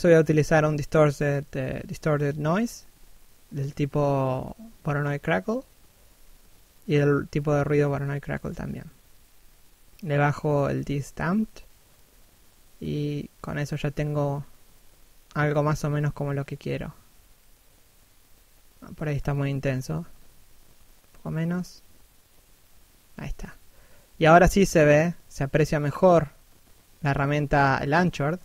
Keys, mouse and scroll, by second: 13.8 right click, 15.0 click, 17.1 middle click, 20.1 middle click, 20.7 click, 23.7 middle click, 25.8 click, 27.9 middle click.